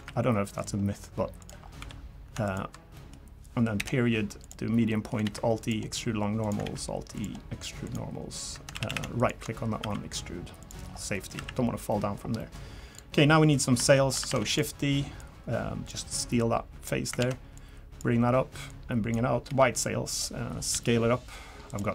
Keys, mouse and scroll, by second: 1.6 scroll up 4, 1.8 3, 2.4 alt+click, 2.9 middle click, 3.8 ., 4.9 middle click, 5.2 alt+e, 6.6 alt+e, 8.7 a, 8.9 a, 9.2 alt+click, 9.8 e, 10.8 scroll down 4, 11.1 middle click, 11.3 a, 11.9 middle click, 12.4 middle click, 12.9 click, 13.5 click, 13.8 shift+middle click, 14.3 shift+d, 15.2 click, 16.4 click, 17.2 ctrl+z, 17.5 click, 18.7 click, 19.5 g, 20.4 scroll up 1, 20.7 s.